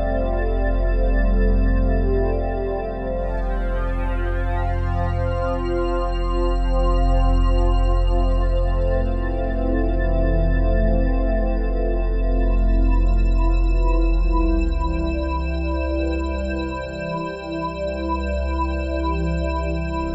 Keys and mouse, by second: 2.6 click, 4.8 click, 9.3 ctrl+alt+click, 10.9 click, 14.8 click, 17.6 click.